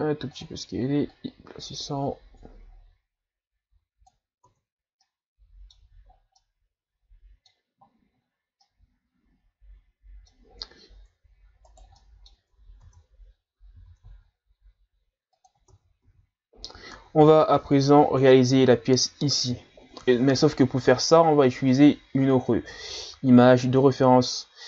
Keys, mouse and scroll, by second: 1.1-4.1 drag, 4.4 Tab, 5.0-5.8 middle drag, 5.8 a, 6.1 scroll down 3, 6.4-11.0 middle drag, 11.0-11.7 scroll up 3, 11.7 right click, 12.0-12.9 middle drag, 12.9 Tab, 13.8 s, 15.7 Tab, 16.0 a, 21.7 click.